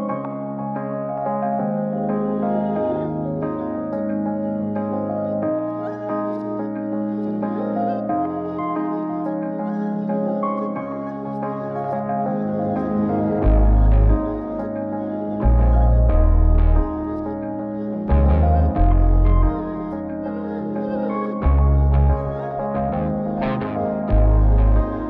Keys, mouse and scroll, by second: 2.4 click, 5.2-7.0 drag, 9.1 click, 9.9 scroll down 2, 10.1 middle click, 10.8 scroll up 2, 11.1 middle click, 11.9-13.7 drag, 14.2-14.8 scroll down 1, 14.8 middle click, 15.7-16.9 drag, 18.2 click, 19.9-24.2 drag, 21.9 KP_0, 24.8-25.0 drag.